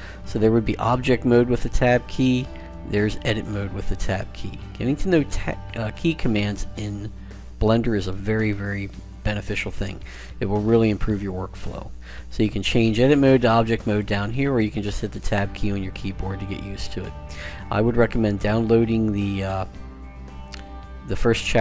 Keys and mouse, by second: 0.0 Tab, 2.7 Tab, 4.4 Tab, 5.0 Tab, 6.5 Tab, 10.0 Tab, 11.3 Tab, 14.1 Tab, 14.1 click, 14.7 Tab, 15.4 Tab, 15.9 Tab.